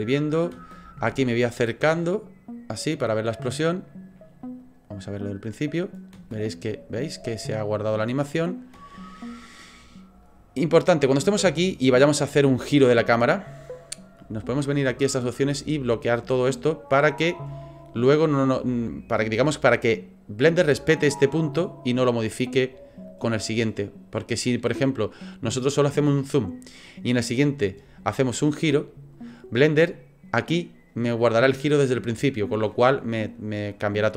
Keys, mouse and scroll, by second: 1.8 ctrl+middle click, 4.6 click, 6.1 space, 10.2 click, 14.9 click, 23.1 click, 27.3 click, 28.4 middle click.